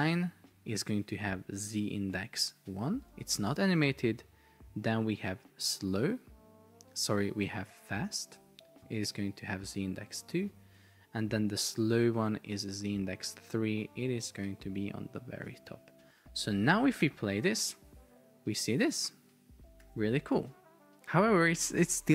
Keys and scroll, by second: 3.1 Return, 10.7 Return, 14.3 Return, 17.2 super+p, 19.9 super+r, 21.6 super+r.